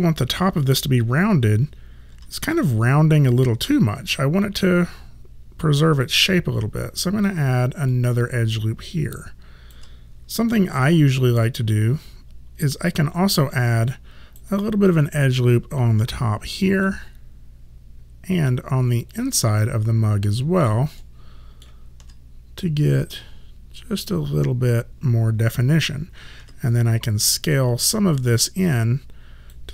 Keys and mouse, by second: 2.2 3, 4.7 click, 7.9 alt+click, 13.4 alt+right click, 15.4 click, 17.7 ctrl+z, 19.2 alt+click, 21.0 alt+middle click, 23.0 click, 26.4 r, 27.6 click.